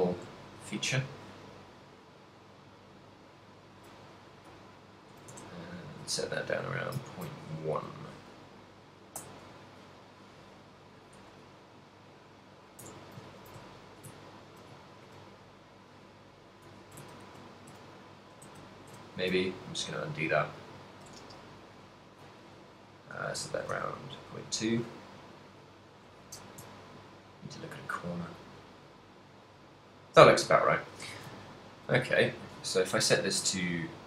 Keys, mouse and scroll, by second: 0.4 shift+middle click, 2.3 click, 3.9 click, 4.4 click, 6.4 middle click, 7.1 ctrl+middle click, 8.0 KP_1, 9.2 n, 10.1 middle click, 10.8 middle click, 11.3 Tab, 12.9 Tab, 13.4 ctrl+middle click, 13.7 shift+middle click, 14.4 ctrl+middle click, 14.9 shift+middle click, 15.3 middle click, 17.2 ctrl+z, 17.6 ctrl+z, 18.5 ctrl+z, 19.4 shift+middle click, 20.2 middle click, 21.2 space, 22.9 click, 25.1 middle click, 26.9 shift+middle click, 27.9 middle click, 28.5 middle click, 30.9 Tab, 31.2 ctrl+middle click, 31.2 a, 31.4 ctrl+middle click, 31.8 ctrl+middle click, 32.4 right click, 33.2 middle click.